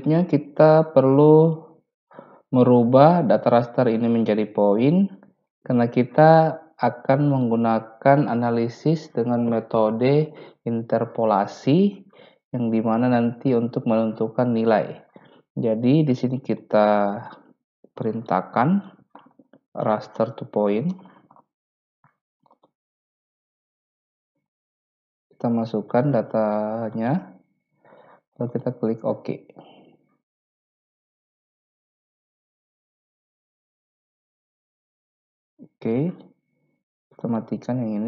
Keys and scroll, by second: 17.7-21.8 typing.